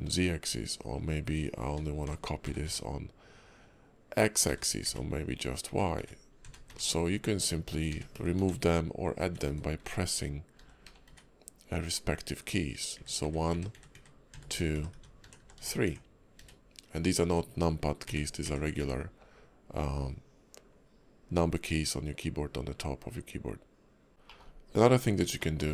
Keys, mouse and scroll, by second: 24.1 right click, 24.1 h, 24.2 middle click, 24.9-25.3 scroll up 2, 25.4 shift+middle click.